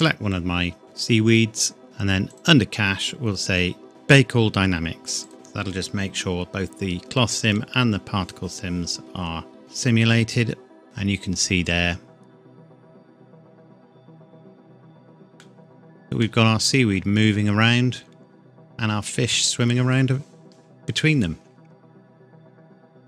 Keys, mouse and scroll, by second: 0.3-1.1 scroll up 1, 1.1 scroll down 1, 2.3 click, 2.7-3.1 scroll down 1, 5.2 click, 9.6 click, 10.8 middle click, 11.2-12.0 scroll up 1, 14.6 click, 15.4 middle click, 17.1 scroll down 1.